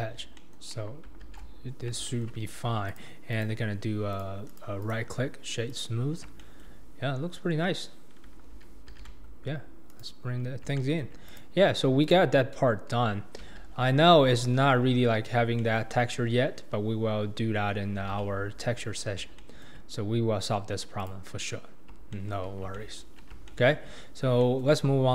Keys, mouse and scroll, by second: 0.1 scroll down 2, 0.4-0.7 middle drag, 0.7 KP_1, 1.2 alt+z, 1.7-2.1 scroll up 2, 2.1-2.4 shift+middle drag, 2.4-2.9 scroll up 2, 2.9 click, 3.3-4.2 right drag, 4.5 click, 4.8 right click, 6.1-6.4 scroll down 4, 6.4-6.9 shift+middle drag, 6.9-7.7 scroll up 1, 7.7-8.2 scroll up 1, 8.5 alt+z, 8.9 alt+z, 9.9 click, 10.3-10.8 scroll down 4, 10.8-11.3 shift+middle drag, 11.3 click, 12.0 click, 13.0-13.4 scroll up 2, 13.6 alt+z, 14.5-15.0 scroll down 2, 15.0-15.6 scroll up 2, 15.6-16.7 shift+middle drag, 16.7-17.2 scroll down 3, 17.2-18.0 scroll up 3, 18.0 alt+z, 18.8-19.3 scroll down 1, 19.3 shift+scroll down 1, 19.4-20.0 shift+middle drag, 20.0-21.0 scroll up 2, 21.0 click, 21.6-22.1 scroll down 3, 22.1-24.1 shift+middle drag, 24.1-24.4 scroll up 1, 24.4-24.8 shift+middle drag, 24.8-25.1 scroll up 2.